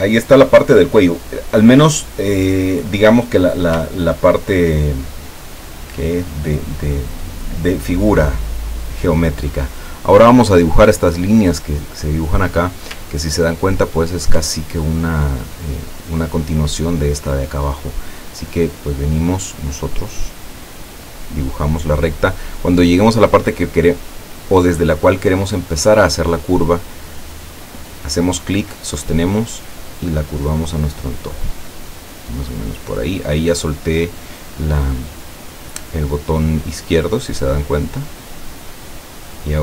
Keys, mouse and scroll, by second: 4.1 ctrl+scroll up 2, 6.4 click, 13.1 ctrl+middle click, 14.8 ctrl+scroll down 2, 19.7 click, 28.6-31.8 drag, 39.4 click.